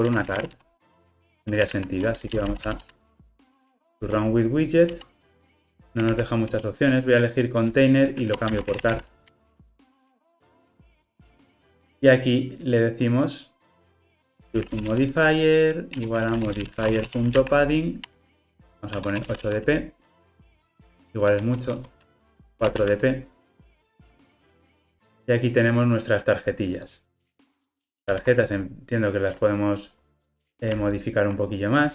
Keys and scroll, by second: 1.5 super+z, 2.7 alt+Return, 9.4 Return, 16.0 Return, 28.2 super+p, 30.1 Escape, 30.9 super+b.